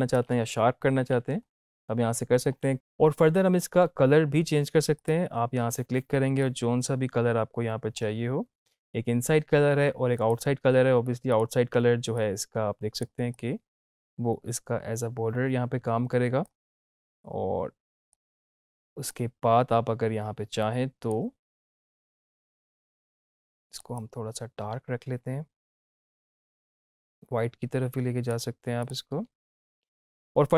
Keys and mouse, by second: 0.9 ctrl+z, 4.9-28.7 drag.